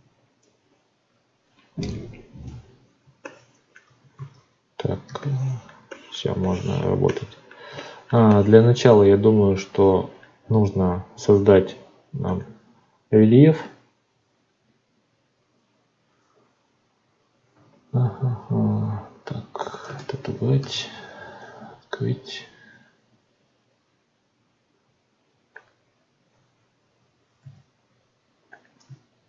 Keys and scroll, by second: 4.1 ctrl+z, 19.8 ctrl+space, 20.5 n.